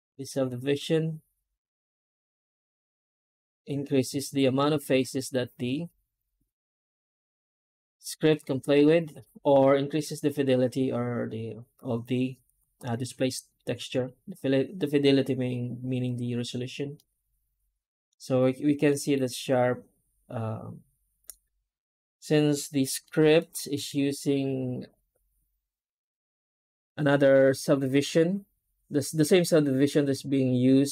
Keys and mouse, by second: 16.8-17.9 middle drag, 18.7 middle drag, 22.9 middle click, 23.2 middle click, 23.7 F9.